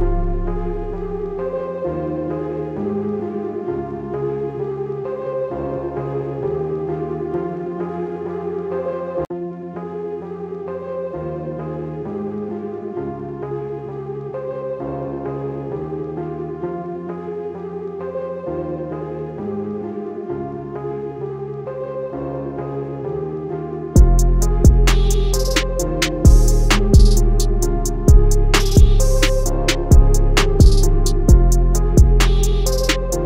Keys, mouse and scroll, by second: 6.0 scroll down 1, 6.2 scroll up 1, 8.5 click, 11.4 z, 12.3 click, 15.0 click, 16.1 alt+scroll down 1, 16.3 scroll up 1, 16.9 click, 20.8 click, 24.8 click, 31.9 click.